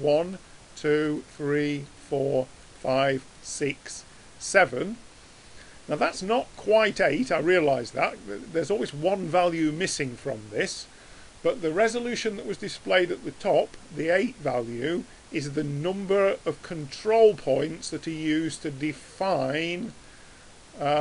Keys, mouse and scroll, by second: 0.2-6.3 drag, 6.6 middle click, 8.4 middle click, 16.7-21.0 drag.